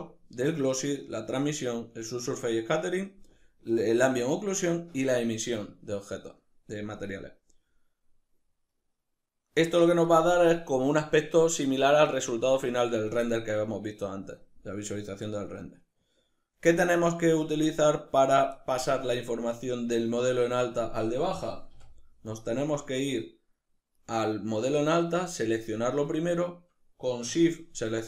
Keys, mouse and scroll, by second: 8.3-23.6 middle drag, 23.6 right click, 27.8 shift+right click.